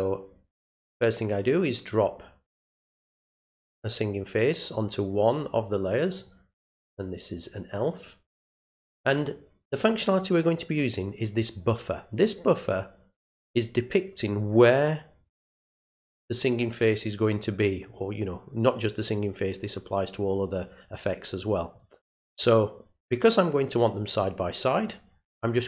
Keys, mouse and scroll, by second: 1.0-3.1 drag, 4.7-6.2 drag, 8.3 click.